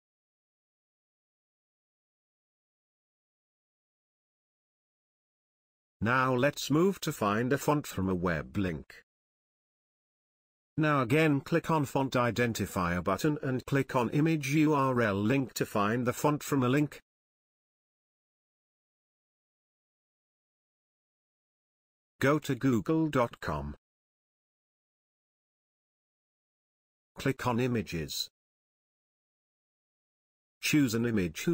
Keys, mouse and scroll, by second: 8.0-10.5 drag, 14.7-15.3 scroll down 1, 19.0 click, 21.7 click, 21.8-23.1 typing, 24.8 Return.